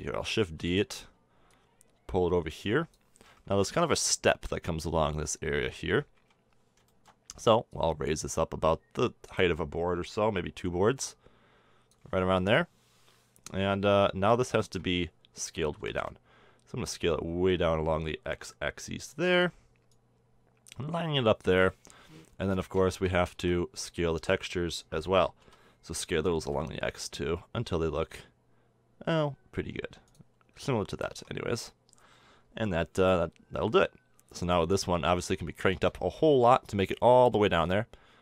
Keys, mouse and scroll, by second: 0.9 shift+d, 2.0-4.1 drag, 6.6 KP_1, 7.0-10.1 middle drag, 12.9 KP_7, 13.7-16.1 middle drag, 16.2 s, 20.4-22.4 drag, 22.4 scroll down 1, 22.4-23.4 middle drag, 23.4 Tab, 23.8 a, 25.9 s, 31.4 a, 31.6 Tab, 33.2 middle click, 33.9 middle click, 36.4-38.1 middle drag.